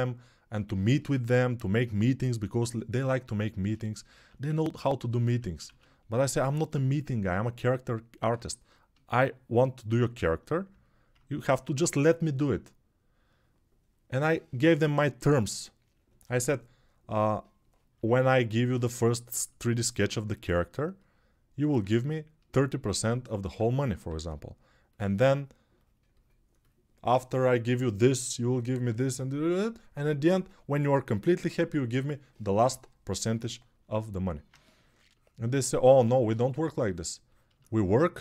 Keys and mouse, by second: 4.2 ctrl+1, 5.2 ctrl+z, 5.4 ctrl+z, 18.9-38.2 ctrl+alt+drag.